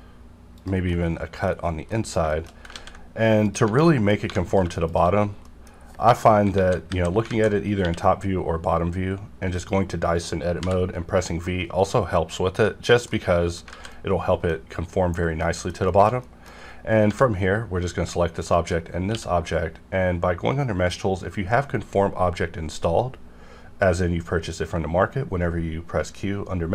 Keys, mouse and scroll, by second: 0.9 middle click, 1.5 scroll up 1, 1.9 middle click, 2.7 ctrl+a, 3.4 click, 3.8 middle click, 4.2 3, 4.5 click, 5.2 scroll down 1, 5.4 middle click, 6.5 KP_7, 6.9 KP_5, 7.3 alt+z, 7.8-9.5 scroll up 1, 9.5 click, 10.6 v, 11.0-12.5 scroll up 1, 12.5 click, 13.1 middle click, 13.7 alt+z, 13.9-15.4 middle drag, 15.8 shift+middle click, 16.0 shift+middle click, 17.0 scroll down 1, 18.4 shift+click, 19.1 q, 21.0-22.8 scroll down 1.